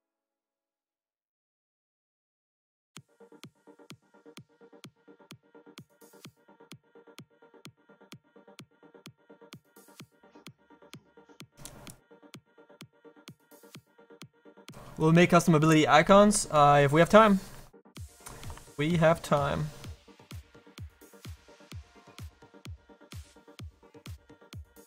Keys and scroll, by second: 21.8 s.